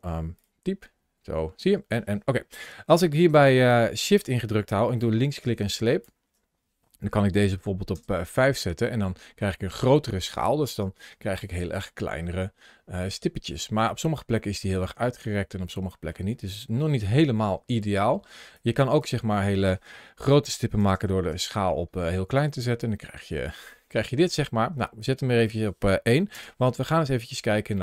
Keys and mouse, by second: 0.0 n, 0.6 n, 1.4 n, 4.8-7.9 shift+drag, 12.0-13.4 middle drag, 14.4 shift+middle click, 14.8-15.9 middle drag, 16.7 shift+middle click, 18.5-21.2 shift+drag, 22.6-24.2 middle drag, 24.9-26.3 shift+drag, 27.6 shift+click.